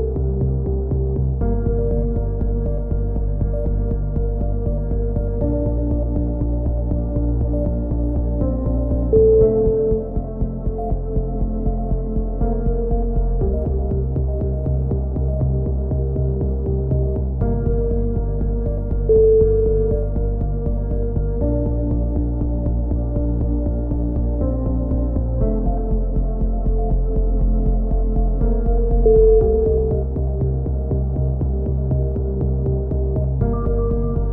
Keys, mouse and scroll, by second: 0.2 click, 1.9-5.1 middle drag, 5.1 click, 5.7 z, 5.9 z, 6.2-7.4 drag, 7.3 v, 7.7 z, 7.9 click, 9.8 click, 10.8 ctrl+z, 11.2-12.6 drag, 12.7 a, 12.7 z, 13.1-14.3 drag, 16.0 right click, 16.9 f, 17.1-18.2 right drag, 18.2 f, 19.2 f, 19.4 a, 19.7 Tab, 20.2 middle click, 23.6 middle click, 24.0-25.0 drag, 24.3 Tab, 25.1-26.1 right drag, 25.9 v, 26.6 click, 29.5-31.4 drag, 32.1 ctrl+z, 32.4 a, 32.7 middle click, 33.2 click, 33.5 x, 33.9 right click.